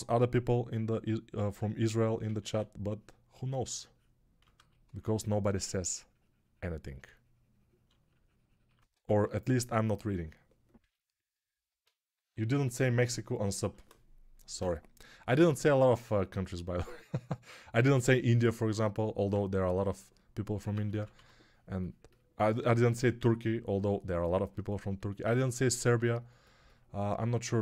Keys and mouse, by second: 2.1 ctrl+z, 5.4 2, 8.8 1, 20.6 ctrl+z, 20.9 ctrl+z, 21.0 2.